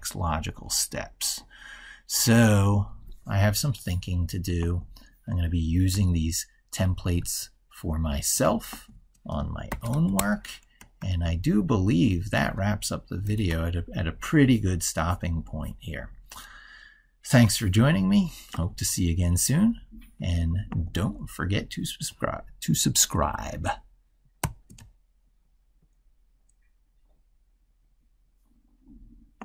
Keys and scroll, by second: 7.0 ctrl+super+Left, 11.0 ctrl+super+Left, 13.1 ctrl+w, 24.2 ctrl+alt+y.